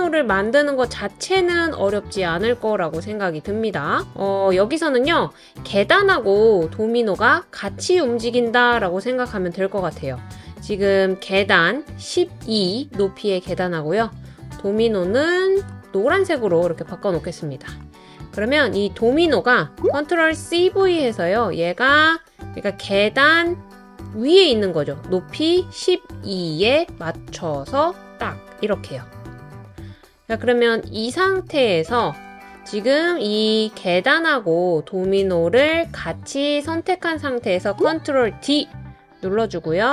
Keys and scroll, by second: 20.1 super+c, 20.3 super+v, 38.3 super+d.